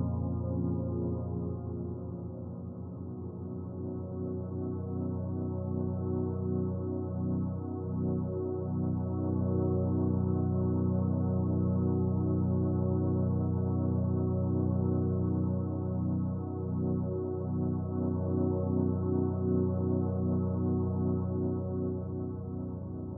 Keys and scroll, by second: 15.9 ctrl+z.